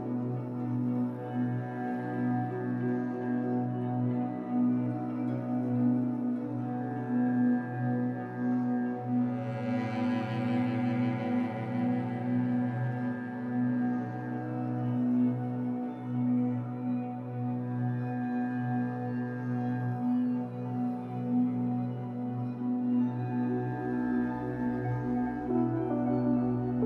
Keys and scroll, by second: 11.6 2, 13.1 w, 16.4 Escape, 16.7 3, 17.4 shift+Tab, 17.9 Escape, 22.3 3, 23.1 shift+Tab, 23.6 Escape, 24.0 2.